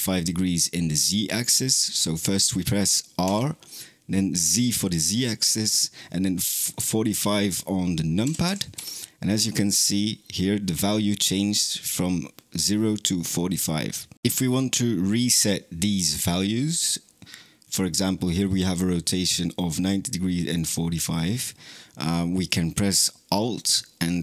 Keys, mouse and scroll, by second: 3.1 r.